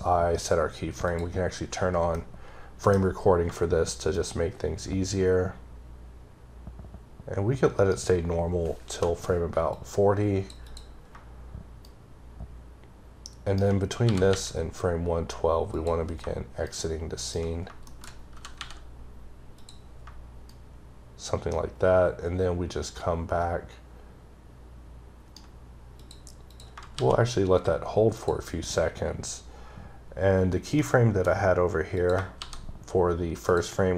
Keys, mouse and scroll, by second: 0.9 click, 2.0 middle click, 4.0 shift+right click, 9.6 click, 10.5 double click, 11.7 shift+right click, 15.6 click, 16.5 shift+right click, 17.5-18.2 shift+scroll down 3, 17.7 shift+middle click, 18.2 g, 19.4 click, 20.3 shift+right click, 25.8 click, 26.3 click, 26.8 shift+d, 28.0 click, 29.5-29.9 scroll up 3, 29.9-30.6 scroll down 4, 30.6 middle click, 31.8 click, 32.2 shift+d, 33.3 click.